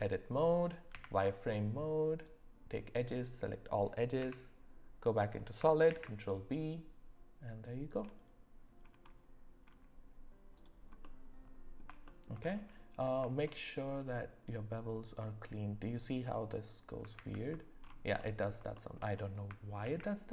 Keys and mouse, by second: 0.9 z, 2.1 click, 2.7 click, 4.2 z, 5.9 ctrl+b, 11.0 middle click, 12.0 shift+middle click, 13.4 shift+middle click, 17.1 ctrl+z, 18.2 middle click, 18.7 shift+middle click, 19.8 ctrl+b.